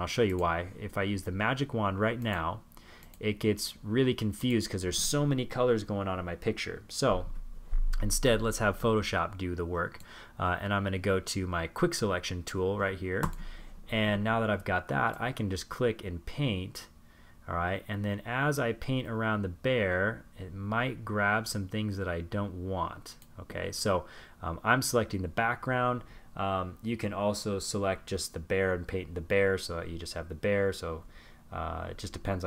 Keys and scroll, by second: 32.0 super+z.